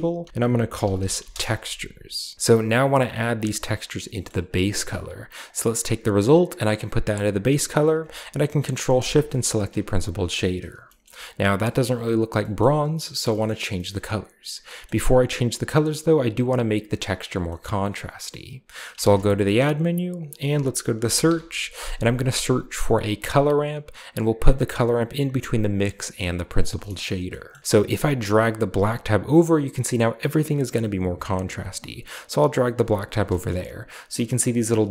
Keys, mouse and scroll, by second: 0.0-3.2 typing, 2.3 middle click, 2.9 click, 3.2 click, 3.7-4.4 drag, 3.8-4.4 scroll up 1, 4.3 typing, 4.4 middle click, 5.3 click, 6.1-7.4 drag, 8.9 ctrl+shift+click, 9.4 click, 9.8 g, 10.0-10.8 drag, 11.0 middle click, 12.2-14.6 scroll up 3, 12.5-13.2 middle drag, 13.4 middle click, 13.8 middle click, 14.8-15.7 middle drag, 17.5-18.8 middle drag, 18.9 shift+a, 20.1 click, 20.9 typing, 23.2 click, 25.6 drag, 26.2-26.5 drag, 26.8-27.6 scroll up 5, 28.1-32.5 drag, 33.4 shift+middle drag, 33.6-34.9 scroll up 3.